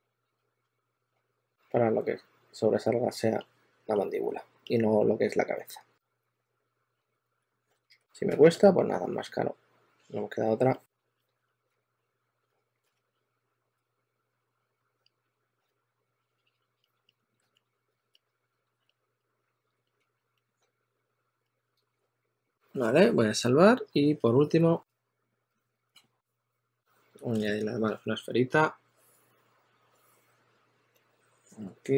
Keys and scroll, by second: 0.3 s, 1.5 s, 7.3-9.3 typing, 11.6 s, 12.0 s, 12.4 s, 12.8 super+a, 13.4-14.2 typing, 15.6 s, 17.2-18.8 typing, 19.9 s, 20.4 2, 25.4 5, 26.9 q, 27.2 super+a.